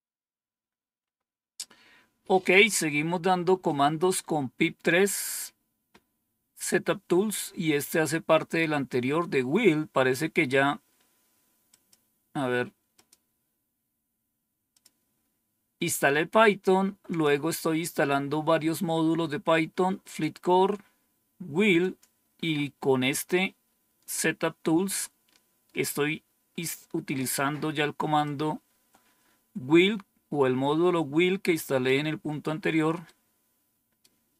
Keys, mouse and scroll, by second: 11.6 click, 12.8 click, 14.6 click, 17.0 click, 19.9 click, 21.7 click, 28.1-31.8 drag, 32.9-33.9 right drag.